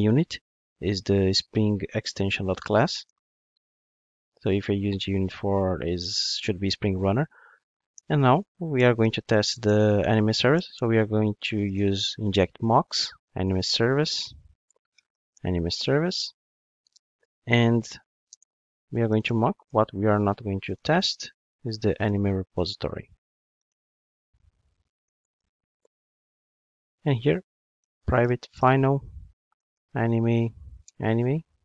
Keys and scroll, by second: 2.4 Return, 7.4 Tab, 11.3 Return, 14.7 Return, 19.7 Return, 30.9 Return.